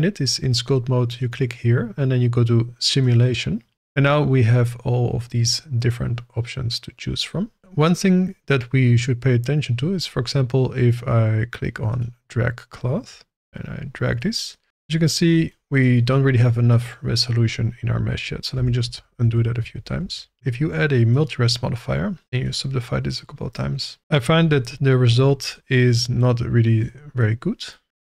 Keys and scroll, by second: 18.5 ctrl+z.